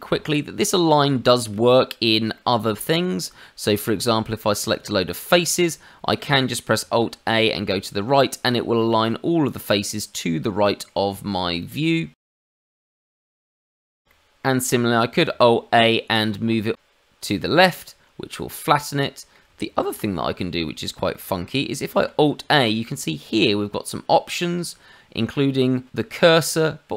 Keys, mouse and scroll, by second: 0.1-0.4 scroll up 2, 0.5 middle click, 1.2 shift+middle click, 2.3 middle click, 3.2 click, 5.1 middle click, 6.8 alt+a, 8.4-8.8 scroll up 2, 8.8 middle click, 11.5 click, 12.4 middle click, 13.1 ctrl+z, 13.4 shift+middle click, 13.5 middle click, 13.8 scroll down 2, 14.0 middle click, 14.1 middle click, 15.2 alt+a, 18.0 scroll up 2, 18.2 middle click, 19.8 ctrl+z, 20.3 scroll down 2, 20.6 middle click, 21.1 shift+middle click, 21.9 alt+a.